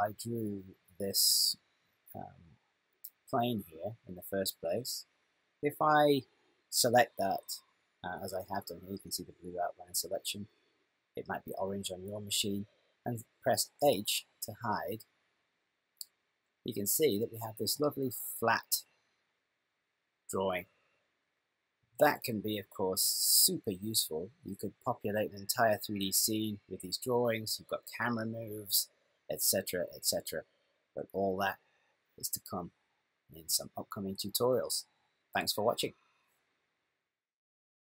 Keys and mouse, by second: 13.9 h, 15.7 middle click.